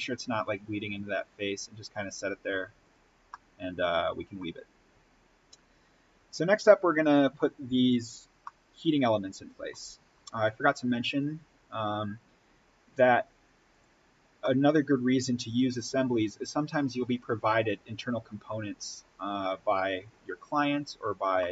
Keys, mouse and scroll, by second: 2.4-2.8 scroll up 1, 2.8 click, 3.1 scroll up 1, 3.2-4.6 middle drag, 4.6-5.8 scroll up 1, 8.1-8.4 scroll down 1, 8.4 middle click, 9.3-10.1 scroll down 1, 11.6-13.6 drag, 14.3-21.3 middle drag, 21.3-21.5 middle drag.